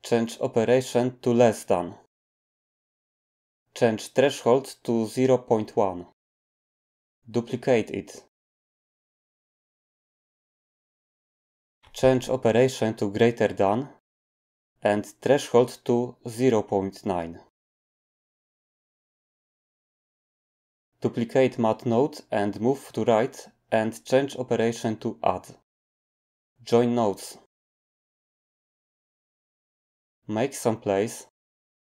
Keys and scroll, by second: 5.2 typing, 5.7 Return, 8.4 d, 10.0 typing, 16.1-16.6 typing, 17.2 Return, 22.2 typing.